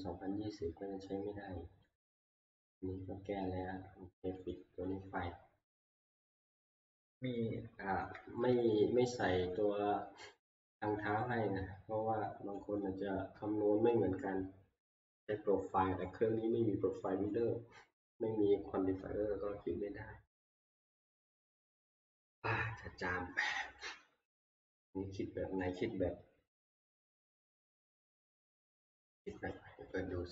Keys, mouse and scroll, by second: 1.8 middle click, 4.5 click, 6.7-8.4 scroll, 8.4 middle click, 9.4 shift+middle click, 9.6-10.3 scroll, 12.5 shift+middle click, 12.5-14.2 scroll, 12.8 shift+middle click, 15.2 click, 15.2 scroll, 15.3-16.0 scroll down 12, 16.2 scroll down 1, 17.2 middle click, 24.0 click, 25.6 middle click, 29.5 F12.